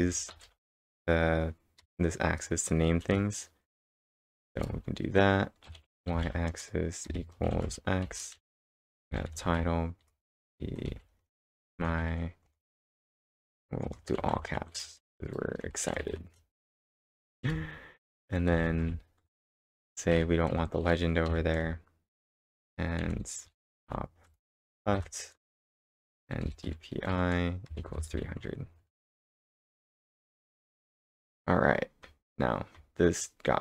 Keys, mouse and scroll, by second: 0.0-1.8 typing, 2.9-21.3 typing, 23.0 shift+;, 26.1 ,, 26.2 space, 27.4-28.4 typing, 28.7 Right, 28.9 Right, 29.1 ctrl+Return, 30.5-31.2 scroll down 6, 30.8-32.3 typing, 31.3 scroll up 2, 31.6 scroll down 2.